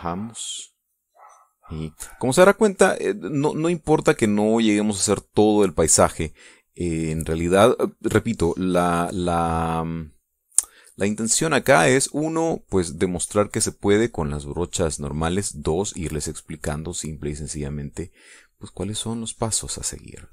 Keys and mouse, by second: 0.7-3.7 drag, 3.8-5.5 drag, 5.6 middle click, 6.7 middle click, 7.4 middle click, 12.6-14.6 drag.